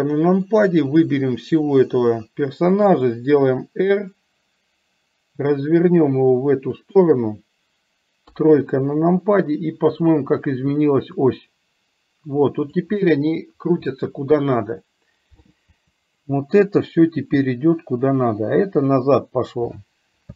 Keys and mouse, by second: 1.0-1.8 drag, 3.0 r, 8.3 KP_3, 11.4-12.9 drag, 16.9-19.7 drag.